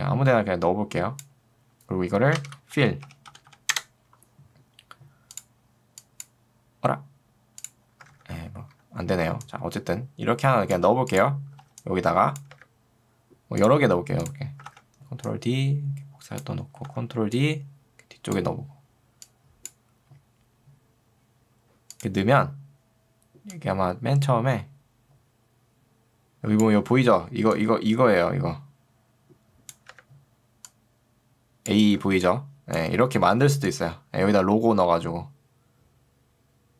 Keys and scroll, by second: 2.5 ctrl+space, 2.9 f, 8.1 ctrl+z, 11.7 ctrl+2, 12.7 Escape, 14.7 ctrl+d, 16.9 d, 26.9 ctrl+2, 29.9 Escape, 32.1 ctrl+2, 33.1 Escape.